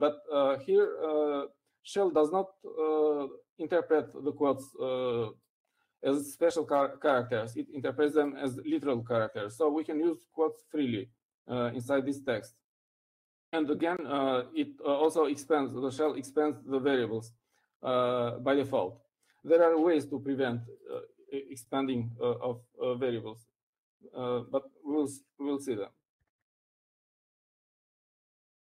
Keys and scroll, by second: 28.3 typing.